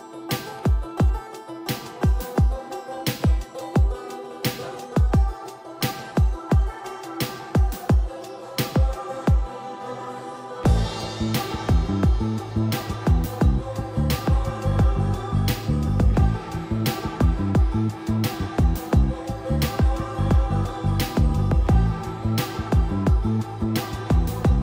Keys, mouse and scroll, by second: 1.0-7.7 drag, 7.7 scroll down 1, 8.6-21.7 drag.